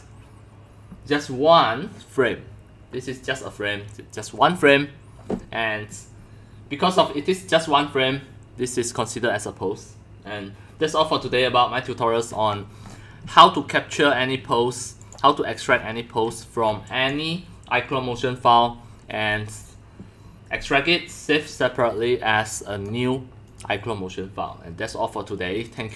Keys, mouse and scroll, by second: 5.4 right click, 10.7 right click, 10.8 right click, 12.3 middle click, 12.6-13.0 scroll, 12.9 scroll up 1, 13.0 scroll, 13.3 scroll, 15.0 click, 15.7 middle click, 15.7 scroll, 16.0-17.2 typing, 17.1-21.7 drag, 21.9 click, 22.5 click, 23.5 click.